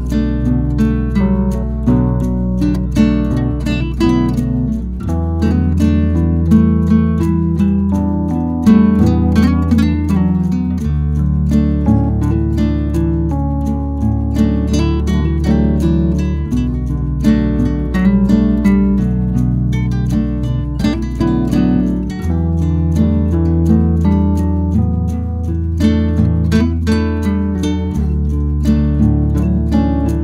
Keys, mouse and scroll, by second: 4.7-5.0 scroll up 2, 5.0 g, 8.7-13.1 drag, 13.1-14.7 scroll down 10, 14.7-16.1 shift+drag, 16.1 s, 17.4 middle drag, 17.7 scroll down 1, 17.7-18.6 scroll up 4, 18.0 shift+middle drag, 18.6 ctrl+c, 18.8 ctrl+v, 18.9 g, 19.9-20.2 shift+middle drag, 20.2-20.7 scroll up 2, 20.7-21.3 scroll down 2, 21.3 s, 22.8-24.0 middle drag, 24.0 click, 24.3 Tab, 24.7 BackSpace, 24.8 BackSpace, 25.3 Tab, 25.6 click, 25.9 click, 26.3 KP_3, 26.8 scroll up 2, 27.0-27.4 shift+middle drag, 27.4 g, 30.1-30.2 drag.